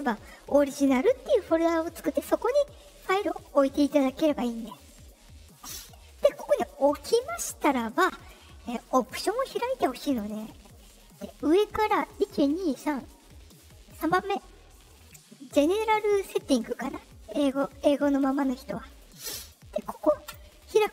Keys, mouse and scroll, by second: 2.3 click, 3.7 click, 6.9 click, 8.9 click, 20.2 click.